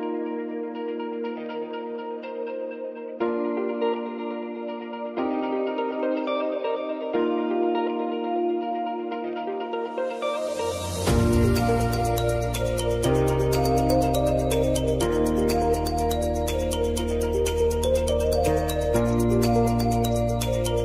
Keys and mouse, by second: 2.6 space, 3.4 click, 3.7 space, 7.3 click, 7.7 ctrl+d, 8.7 Return, 9.2-10.3 typing, 11.4 e, 11.9 Return, 13.1 click, 13.7 ctrl+d, 14.5 click, 16.5 F4, 17.1 click, 19.7 space.